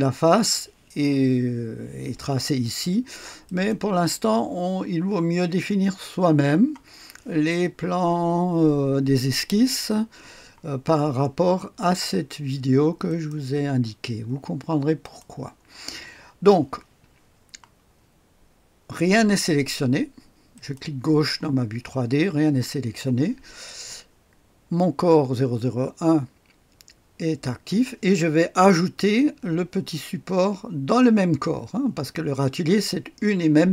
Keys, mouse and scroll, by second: 3.4 click, 11.7 click, 13.0 click, 15.0 click, 20.5 click.